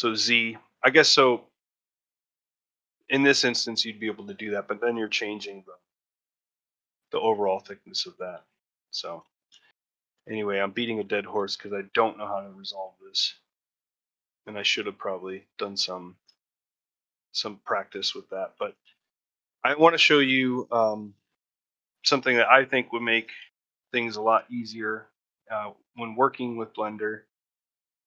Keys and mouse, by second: 9.2 ctrl+middle click, 9.4 shift+middle click, 9.7 middle click, 10.1 shift+middle click, 10.5 middle click, 11.0 shift+middle click, 11.2 ctrl+shift+middle click, 11.8 middle click, 12.7 a, 13.0 a, 13.2 middle click, 13.6 ctrl+middle click, 13.9 middle click, 14.5 shift+middle click, 15.2 middle click, 15.6 middle click, 15.9 ctrl+middle click, 16.2 shift+middle click, 16.4 middle click, 17.0-18.0 middle drag, 18.2 alt+middle click, 18.8 shift+middle click, 19.6 ctrl+middle click, 20.8 middle click, 21.9 Tab, 22.5 shift+z, 22.9 middle drag, 23.3 shift+z, 24.1 alt+z, 24.5 ctrl+middle drag, 24.7-25.2 shift+middle drag, 25.9 shift+middle drag, 27.9 middle click.